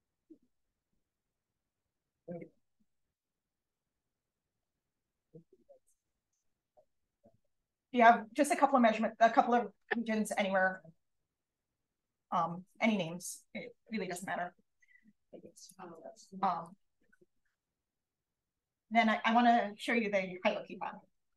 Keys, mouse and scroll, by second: 0.2 click, 0.4 right click, 1.4 click, 1.7-2.6 typing, 3.0-5.6 drag.